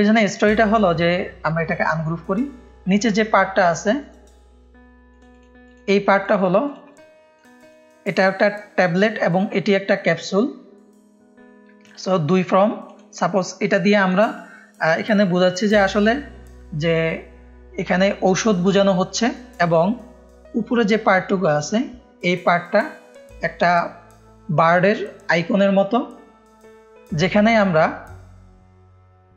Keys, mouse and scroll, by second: 0.7 right click, 1.9 click, 2.2 click, 2.9 click, 3.5-3.9 drag, 4.5 right click, 5.3 click, 5.6 drag, 6.2-6.8 drag, 6.9 click, 7.5 click, 7.9-10.3 drag, 11.8 click, 12.1 click, 12.8-13.6 drag, 13.7 click, 16.8 drag, 18.4 click, 19.6 click, 20.4-21.4 drag.